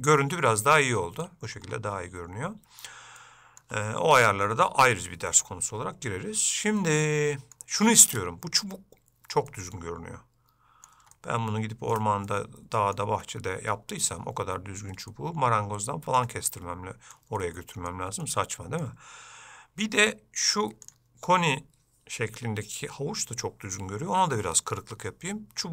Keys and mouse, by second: 6.9 shift+middle click, 9.6-11.0 middle drag, 11.3 ctrl+middle click, 11.3 ctrl+click, 12.4 shift+middle click, 15.2-16.3 ctrl+middle drag, 16.6 middle click, 17.5 shift+middle click, 18.3 middle click, 20.9-25.7 drag.